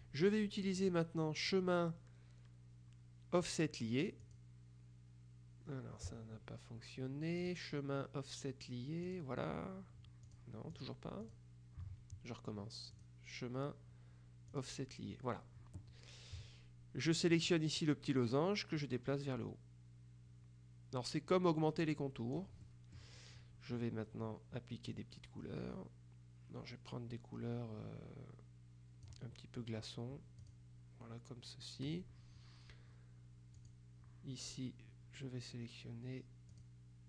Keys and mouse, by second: 0.9 click, 4.3 click, 7.5 click, 9.2 click, 10.4-11.9 drag, 13.1 click, 14.6 click, 17.4 middle click, 18.9-22.9 drag, 25.0-29.6 drag, 30.5 click, 33.6 click, 36.7 click.